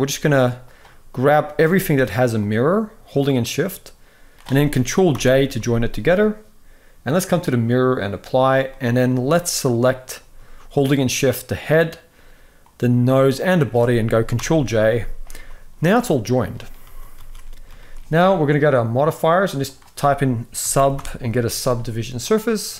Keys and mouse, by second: 1.1 click, 4.9 ctrl+j, 6.9-7.7 drag, 8.4 middle click, 10.6 shift+click, 12.3 shift+click, 13.1 shift+click, 14.1 ctrl+j, 15.1 g, 16.0 middle click, 16.6 ctrl+s, 16.9 ctrl+s, 17.1 middle click, 17.5 shift+middle drag, 18.8-22.7 drag.